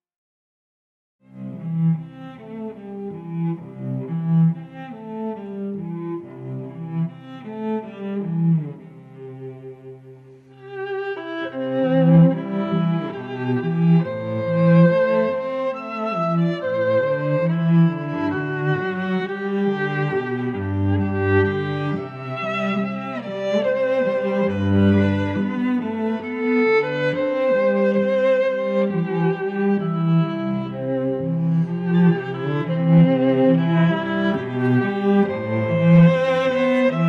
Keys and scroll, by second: 17.2 shift+s.